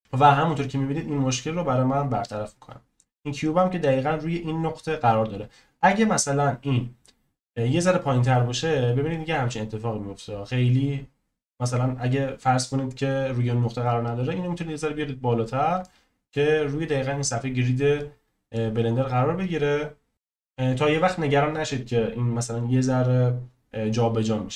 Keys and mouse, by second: 0.0 click, 0.2 click, 1.4 click, 2.0-2.5 middle drag, 5.1-5.7 middle drag, 6.1 middle click, 7.4 middle click, 9.1-10.7 drag, 10.7-13.8 middle drag, 15.8-16.3 middle drag, 17.9-18.5 middle drag.